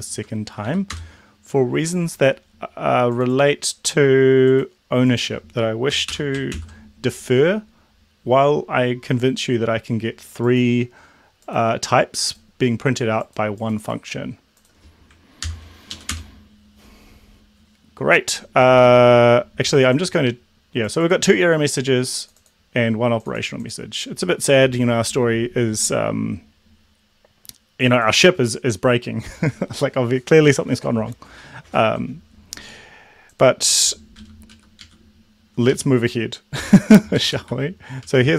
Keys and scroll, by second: 0.2 Up, 0.6 End, 0.9 Return, 6.0 Delete, 6.2 3, 6.5 ctrl+s, 15.5 ctrl+l, 15.9 Up, 16.1 Return, 34.5 Down, 34.9 Up, 35.8 Up, 37.3 alt+Down.